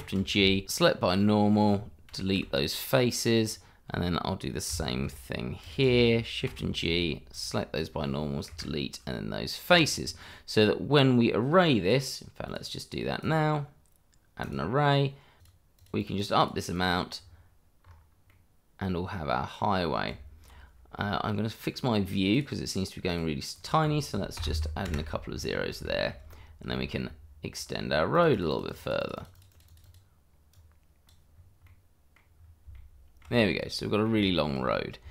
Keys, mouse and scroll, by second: 1.1 click, 1.4 middle click, 2.4 Delete, 3.4 click, 6.4 shift+g, 7.3 click, 8.5 Delete, 9.7 click, 10.0 scroll down 1, 10.3 middle click, 12.4 click, 14.5 click, 15.9 double click, 17.2-17.8 scroll down 1, 17.8 scroll up 1, 18.3 middle click, 19.5 middle click, 20.1 Tab, 22.3 click, 23.6 double click, 24.3 0, 24.8 Return, 25.5 scroll down 1, 25.8 shift+middle click, 26.3-26.7 scroll up 1, 26.7 shift+middle click, 28.1 click, 28.4 double click, 30.5 click, 31.3-31.6 scroll down 1, 31.6 middle click, 32.4-32.7 scroll down 1, 32.7 shift+middle click, 33.3-33.7 scroll up 1, 33.8 middle click, 34.4 shift+middle click, 34.6-35.1 scroll up 1.